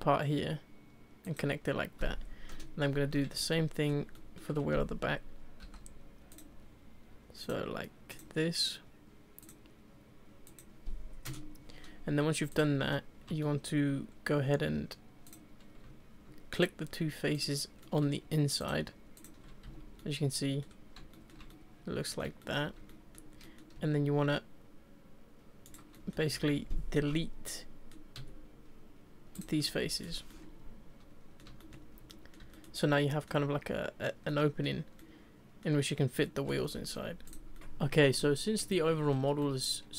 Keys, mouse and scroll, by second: 3.1-3.5 scroll down 1, 3.5 shift+middle click, 3.9 shift+middle click, 4.6-5.2 scroll up 2, 5.6 k, 12.5 click, 12.8 scroll down 4, 13.6 middle click, 14.3 scroll up 2, 15.3 click, 16.5 shift+click, 17.3 shift+click, 17.8 shift+middle click, 18.6 shift+click, 19.1 shift+click, 19.6 z, 20.0 middle click, 20.6 scroll down 2, 21.1-22.8 shift+middle drag, 22.8 scroll up 1, 22.9 middle click, 23.3 scroll up 1, 23.4 middle click, 23.7 e, 25.9-26.3 middle drag, 26.3 ctrl+z, 27.4 middle click, 28.1 Delete, 29.6-30.0 middle drag, 30.0 scroll down 2, 30.3-31.9 middle drag, 31.9 scroll up 1, 32.1-33.5 middle drag, 33.5-34.3 scroll up 1, 34.3 middle click, 34.9 scroll up 1, 35.0-36.6 middle drag, 36.6 Tab, 36.9-37.2 scroll down 2, 37.2 click, 37.6 middle click, 38.2-39.9 middle drag.